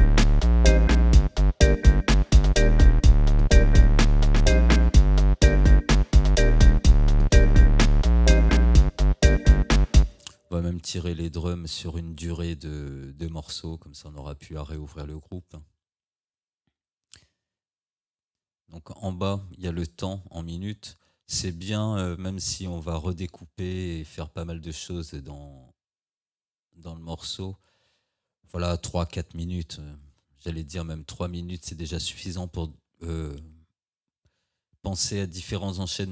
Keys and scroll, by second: 10.0 space.